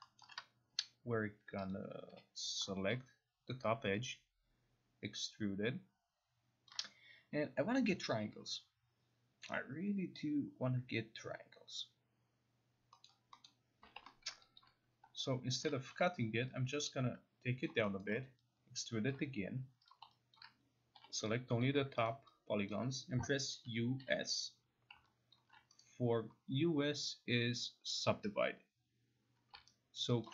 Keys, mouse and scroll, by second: 0.2 alt+middle click, 1.7 click, 2.1 0, 2.9 click, 6.7 ctrl+click, 13.0 middle click, 13.4 middle click, 14.2 alt+middle click, 14.6 alt+click, 15.6 alt+click, 15.9 e, 17.6 click, 18.0 alt+middle click, 19.1 ctrl+click, 19.9 click, 20.3 alt+click, 20.6 middle click, 21.0 0, 21.6 click, 22.1 alt+right click, 22.7 alt+click, 23.6-24.0 typing, 25.3 alt+click, 25.8 right click, 29.5 right click, 30.0 alt+right click, 30.2 alt+click.